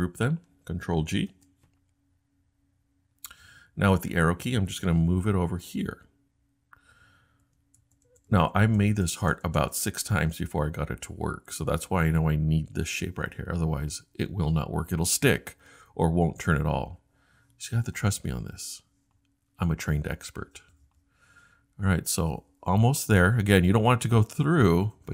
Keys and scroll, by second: 1.3 super+g, 6.1 Tab, 6.6 Tab, 6.6 Tab, 7.1 Tab, 7.1 Tab, 7.2 Tab, 8.1 Tab, 9.0 shift+Tab, 19.3 Right, 24.3 Right, 24.7 Right, 25.0 Right.